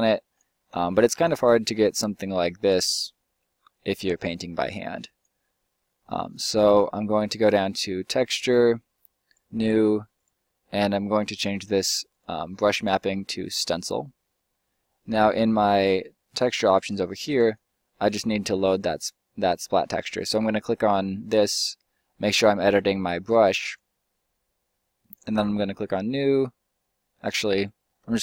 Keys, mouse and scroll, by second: 1.0 ctrl+z, 5.7-8.0 middle drag, 9.3-16.8 drag, 17.4 click, 20.6-28.1 right drag.